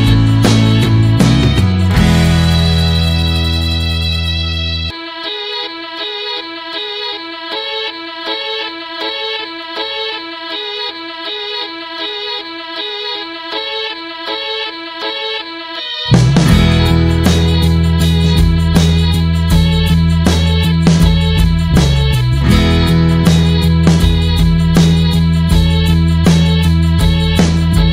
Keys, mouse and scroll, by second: 0.8-3.3 drag, 3.3-6.2 middle drag, 6.2-7.8 ctrl+shift+drag, 7.8 scroll down 1, 8.0 middle click, 8.3-9.1 scroll up 1, 9.1 middle click, 9.7 ctrl+shift+click, 13.5 click, 15.1-16.4 middle drag, 16.4 ctrl+shift+click, 17.0 middle click, 17.4 scroll down 1, 18.7 n, 19.6-24.9 drag, 24.9-27.5 middle drag, 27.5-27.9 ctrl+shift+drag.